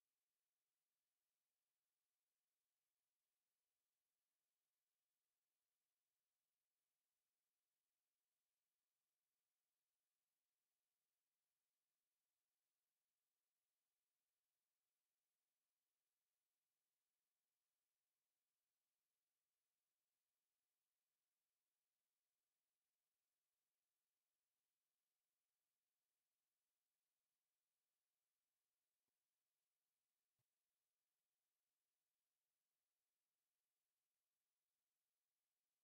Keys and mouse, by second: 1.3-4.8 shift+drag, 5.1 z, 9.7 g, 12.3 z, 13.8 z, 15.6 click, 17.1-25.2 shift+drag, 26.6 middle click, 28.6 z, 29.5 right click, 30.4 ctrl+s, 30.6 z, 32.9 alt+shift+z, 34.1 middle click, 34.7 z.